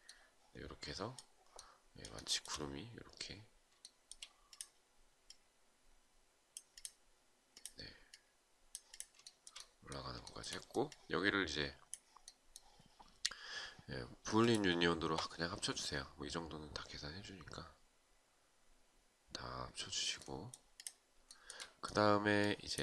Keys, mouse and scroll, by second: 1.7 shift+right click, 3.3 shift+right click, 8.8 shift+right click, 9.8 shift+right click, 20.8 shift+right click.